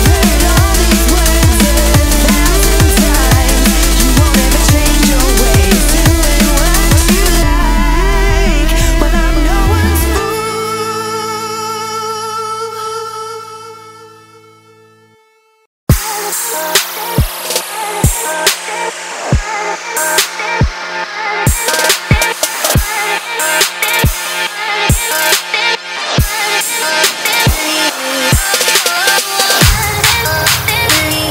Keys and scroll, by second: 29.9 ctrl+space.